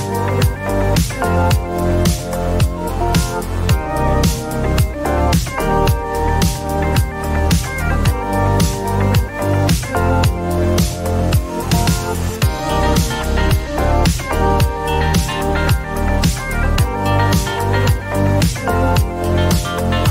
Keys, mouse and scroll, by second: 0.2 right click, 2.9 click, 7.7 click, 10.8 click, 12.3 click, 15.2-15.6 typing, 16.7 Return, 18.9 middle click, 19.8 click.